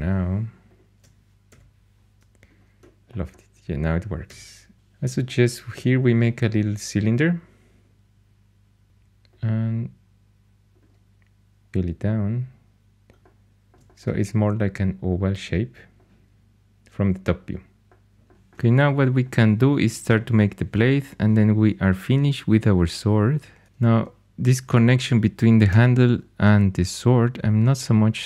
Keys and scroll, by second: 1.4 l, 4.2 4, 8.9 3, 11.4-12.2 typing, 25.6 4.